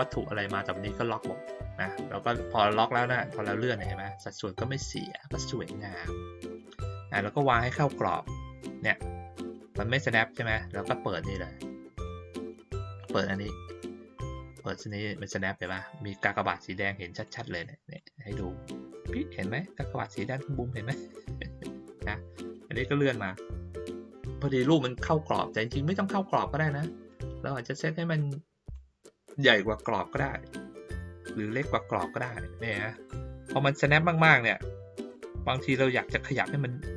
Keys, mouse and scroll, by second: 2.9-5.1 drag, 5.7-10.5 drag, 12.0 click, 14.3-17.2 drag, 17.9-20.0 drag, 23.1 click, 27.1-28.7 drag, 29.3-32.9 drag, 34.1-35.1 drag, 35.5-36.9 drag.